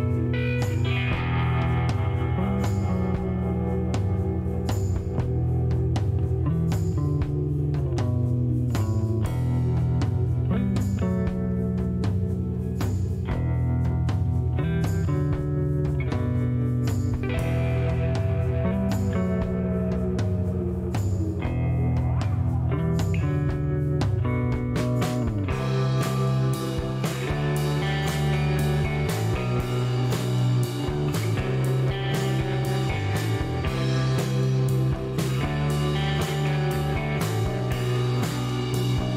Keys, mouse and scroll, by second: 1.6 click, 2.7 ctrl+click, 4.0 click, 5.1 click, 14.1 click, 14.5 click, 14.8 space, 15.5 click, 16.1 space, 19.7 click, 22.1 click, 23.6 click, 24.4 scroll down 1, 25.0 middle click, 25.2 scroll down 1, 25.7 middle click, 27.0 click, 28.0 scroll up 1, 28.4 middle click, 28.6 scroll up 1, 29.1 middle click, 29.3 scroll down 1, 30.9 click, 31.7 click, 32.3 middle click, 32.7 scroll up 1, 33.6 scroll up 1, 34.2 middle click, 35.2 click, 37.6 click, 38.3 click, 39.0 click.